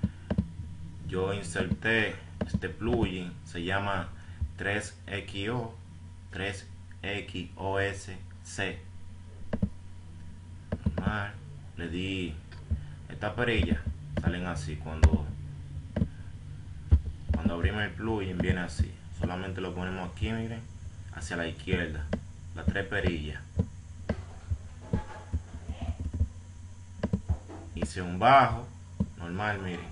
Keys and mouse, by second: 11.3-13.7 drag, 14.2 click, 18.8-21.8 drag.